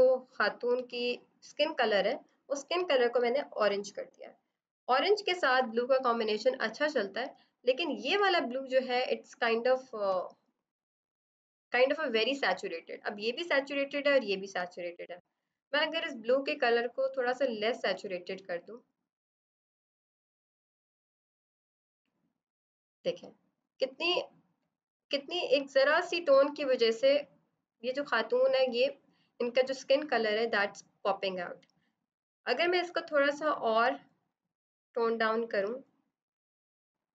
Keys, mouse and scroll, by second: 5.6 click, 7.4-8.5 scroll, 10.0 ctrl+=, 15.3 =, 15.3 click, 23.7 ctrl+-, 25.5 ctrl+=, 29.5 scroll down 1, 29.8 scroll up 1, 30.2 scroll down 1, 31.5 click.